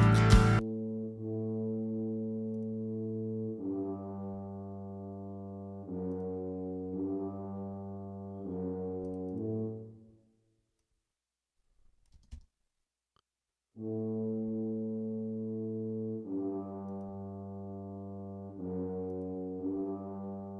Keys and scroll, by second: 12.1 space.